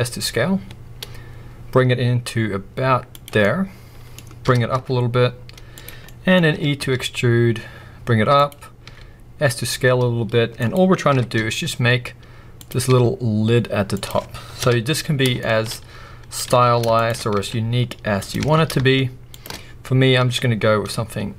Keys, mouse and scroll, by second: 3.2 click, 3.4 middle click, 4.5 g, 5.9 click, 6.0 scroll up 1, 6.2 middle click, 7.1 e, 8.5 click, 8.9 s, 10.7 click, 11.7 e, 12.7 click, 12.9 s, 14.1 click, 14.6 KP_1, 15.4 shift+middle click, 15.7-16.3 scroll up 2, 16.6 alt+a, 17.0 alt+shift+click, 17.4 s, 18.2 click, 18.4 alt+a, 19.3 alt+shift+click, 20.2 s.